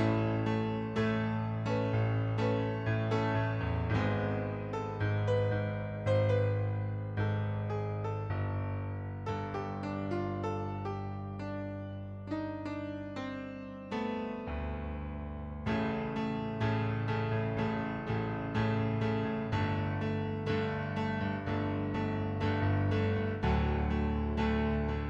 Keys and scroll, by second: 4.3 ctrl+z, 16.1 typing, 19.6-21.5 typing.